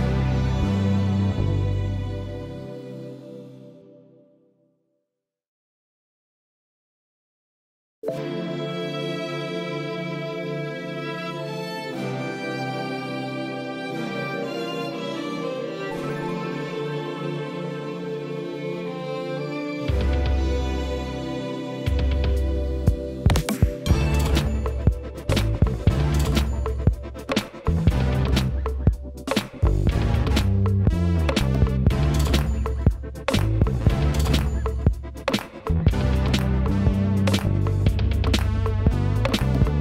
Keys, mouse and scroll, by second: 2.0-16.6 drag, 19.4 click, 23.8-24.8 middle drag, 24.8 KP_Divide, 26.4-29.2 middle drag, 29.2 click, 29.7 middle click, 30.3-31.7 scroll up 6, 31.7 click, 32.8 shift+click, 34.7 shift+click, 35.7-39.4 shift+middle drag, 39.4 KP_Divide.